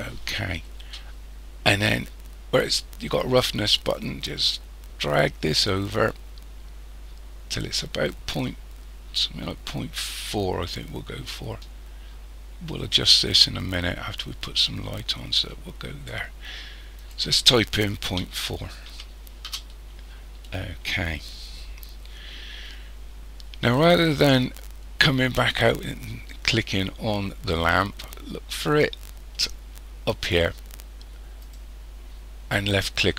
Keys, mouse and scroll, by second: 4.0 click, 17.0 click, 31.4 click.